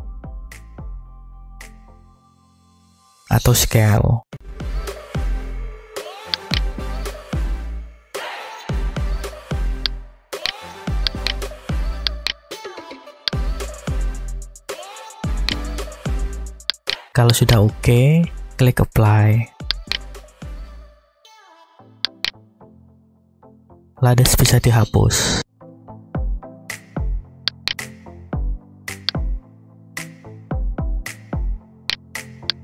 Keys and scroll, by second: 1.7 Escape, 2.7 s, 8.2 Tab, 25.0 Delete.